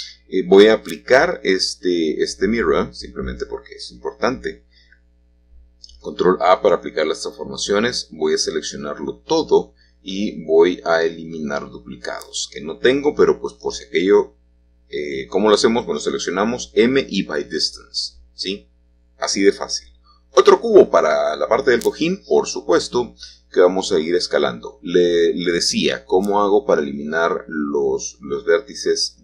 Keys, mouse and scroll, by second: 0.0-1.1 drag, 2.1-4.1 drag, 4.1 ctrl+a, 5.2 Tab, 7.6 click, 8.6 l, 10.9-11.9 drag, 16.2-17.2 drag, 17.3 g, 20.3 click, 23.8-26.2 drag, 26.6-29.2 drag.